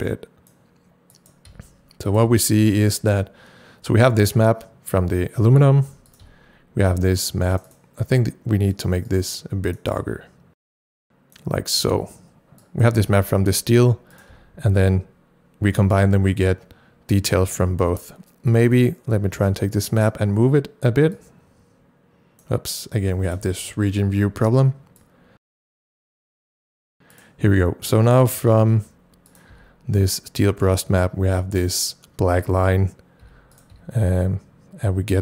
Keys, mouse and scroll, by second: 1.5 c, 2.3 c, 5.9 c, 6.1 click, 7.5 click, 7.7 double click, 8.7 click, 9.1-13.0 right drag, 10.0-14.1 drag, 13.0 c, 14.3 c, 18.6 double click, 19.9 click, 21.6-22.7 drag, 24.1 ctrl+shift+r, 25.4 click, 26.6 click, 28.5 c, 29.3 click, 29.6 c, 33.5 c, 33.6 click.